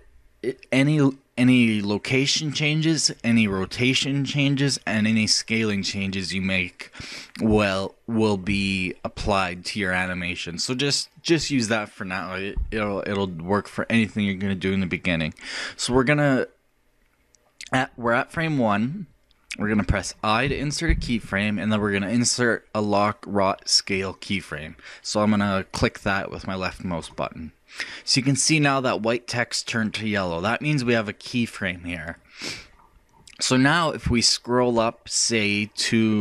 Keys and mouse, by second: 20.5 i, 34.7-36.2 drag.